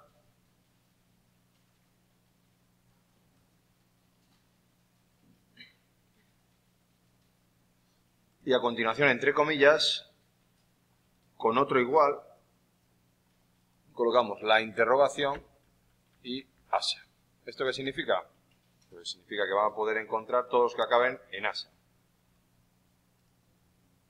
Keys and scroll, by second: 15.2 shift+Left, 15.5 Right, 16.0 Left, 16.3 shift+Right.